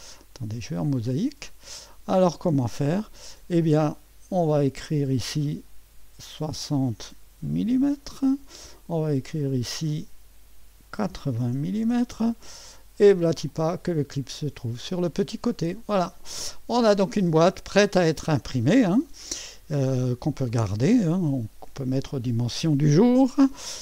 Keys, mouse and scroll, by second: 0.0 click, 0.8 click, 2.1 right click, 4.0 click, 6.4 6, 7.2 KP_0, 7.7 m, 7.8 m, 9.0-10.5 drag, 11.1-11.9 typing, 12.1 Return, 13.5 click, 16.0 typing, 16.7-19.0 drag, 20.5 right click.